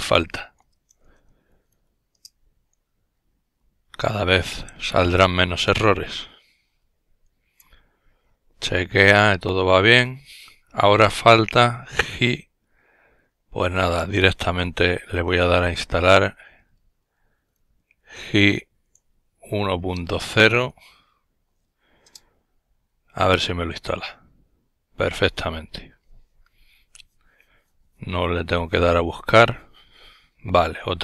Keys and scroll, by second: 0.0-1.9 typing, 1.9 Return, 4.6 typing, 13.0-18.0 typing, 19.0-19.9 typing, 21.6 Return, 24.2 typing.